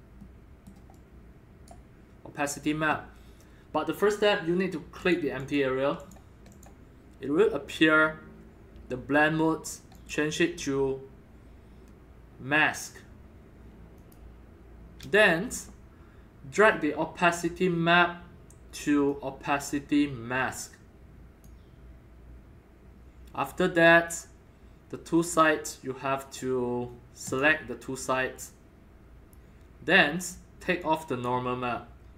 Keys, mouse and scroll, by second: 0.3-1.5 middle drag, 1.0 right click, 1.7-5.0 right drag, 5.0 click, 5.4 click, 6.0 click, 6.5 click, 10.0 click, 10.7-13.1 drag, 14.0 click, 19.1-21.4 drag, 25.2 click, 26.5 click, 27.2-29.2 drag, 30.8-31.2 drag.